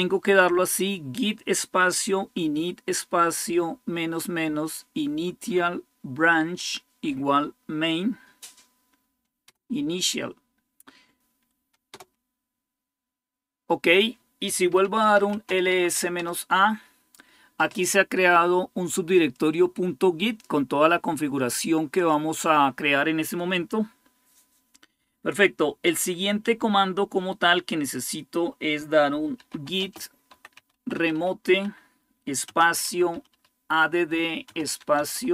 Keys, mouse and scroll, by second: 2.4 Right, 2.5 Right, 2.7 Right, 2.9 Right, 3.3 Right, 7.1 Right, 7.9 Right, 11.7 Return, 14.6-16.0 typing, 19.1-22.4 drag, 28.9-35.3 typing.